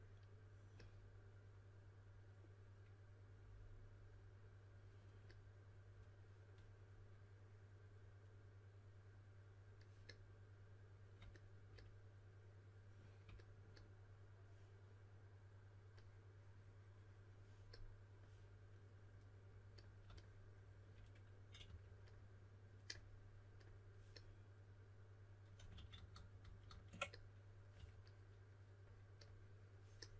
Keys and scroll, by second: 21.6 typing, 25.9 super+z, 26.1 super+z, 27.7 typing.